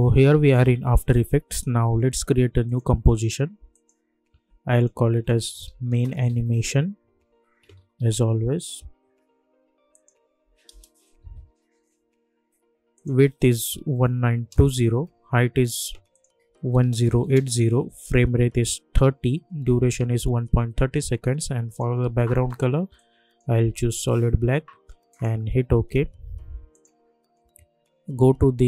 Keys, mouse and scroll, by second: 2.6 click, 4.7-8.6 typing, 9.9 click, 12.7 n, 12.9 click, 16.1 click, 21.6-25.1 drag.